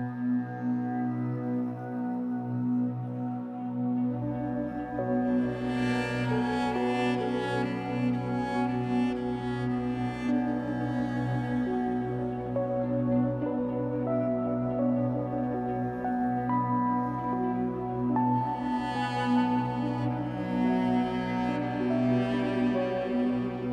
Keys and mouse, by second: 0.0 click, 1.0 ctrl+s, 2.1-4.6 drag, 4.8 click, 5.7 click, 5.9 click, 6.6-8.3 typing, 9.0 Return, 10.6 ctrl+s, 11.7 click, 12.3 click, 13.6 click, 14.4 click, 17.7 click, 20.1 click, 21.1 ctrl+alt+click, 22.4 click, 23.4 click.